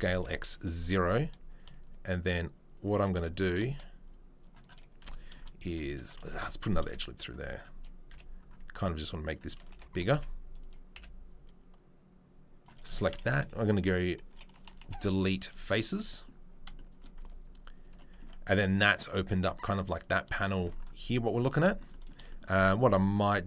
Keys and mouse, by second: 0.8 3, 1.8 shift+click, 2.3 shift+middle click, 3.7 middle click, 6.3 ctrl+r, 7.3-10.1 middle drag, 9.3 c, 9.7 3, 10.1 alt+click, 10.2-17.0 middle drag, 10.9 c, 17.2 Tab, 17.8 Tab, 20.2 shift+middle click, 21.6-23.0 shift+middle drag.